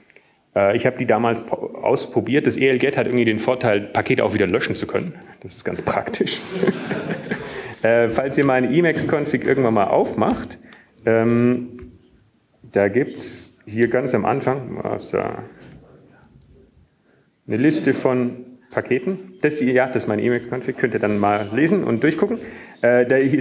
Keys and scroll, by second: 0.1 Up, 11.3 Up, 12.2 Tab, 12.2 Down, 12.7 Down, 13.2 Down, 14.3 Up, 14.3 Return, 19.5 ctrl+Up, 20.0 ctrl+Up, 20.6 ctrl+Up.